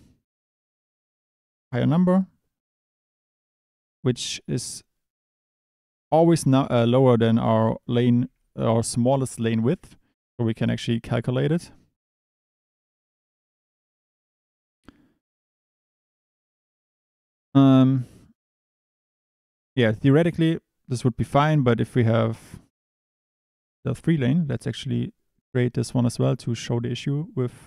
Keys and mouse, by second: 6.4 click, 7.2 Tab, 8.2 Tab, 11.2 click, 13.2 click, 17.6 click, 19.5 click, 21.4 middle click, 24.7 click.